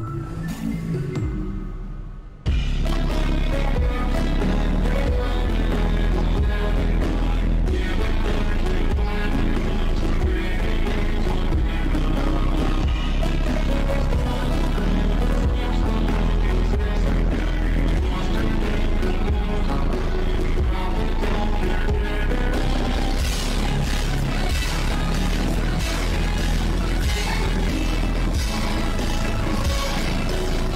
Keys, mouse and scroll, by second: 1.4 click, 1.9 click, 3.3 click, 3.5 click, 3.8 click, 4.4 click, 5.0 click, 7.4 click, 9.8 click, 10.1 click, 11.1 ctrl+click, 11.7 click, 12.0 click, 12.3 shift+click, 12.7 click, 13.8 ctrl+z, 14.0 click, 14.2 click, 14.5 click, 15.3 ctrl+z, 15.9 click, 16.1 shift+`, 16.8 click, 17.3 shift+`, 18.0 click, 19.5 ctrl+z, 19.7 click, 20.0 click, 20.6 ctrl+z, 21.0 click, 21.4 click, 21.9 click, 22.1 click, 22.3 click, 22.4 click, 22.7 click, 23.4 ctrl+z, 23.5 click, 24.2 ctrl+z, 24.4 click, 24.8 click, 25.3 click, 26.5 click, 27.1 click, 28.1 click, 30.0-30.7 scroll down 5.